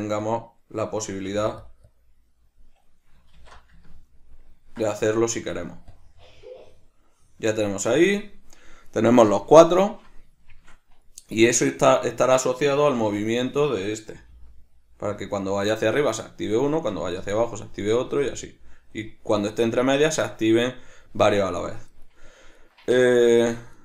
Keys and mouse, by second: 3.0 middle click, 3.5 q, 4.0 middle click, 5.2 Tab, 6.0-10.6 drag, 10.6 shift+middle click, 12.0 right click, 13.0 Tab, 13.5 right click, 14.3 g, 16.2 right click, 17.1 g, 18.1 right click, 18.2 g, 20.3 right click, 22.1 right click, 22.7 right click, 23.5 Tab.